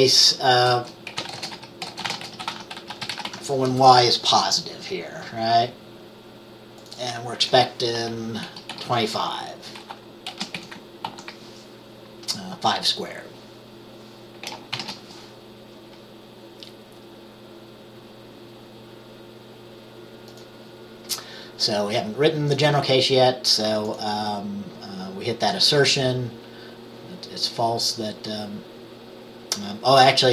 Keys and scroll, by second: 1.0-3.9 typing, 8.6-9.3 typing, 10.4 typing, 11.2 ctrl+s, 14.8 ctrl+b.